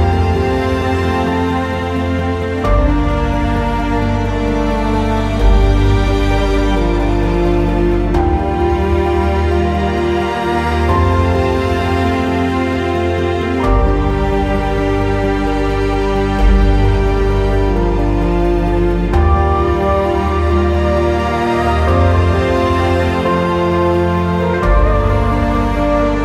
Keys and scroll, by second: 20.9 q.